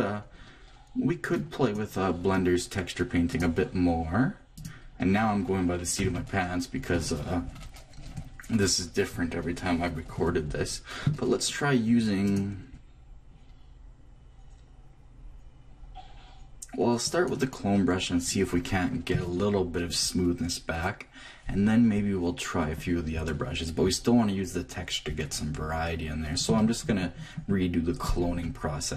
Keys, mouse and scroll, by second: 1.3-3.2 drag, 3.3-5.0 drag, 6.0 t, 12.2-13.9 drag, 26.4 click, 28.1-28.9 drag.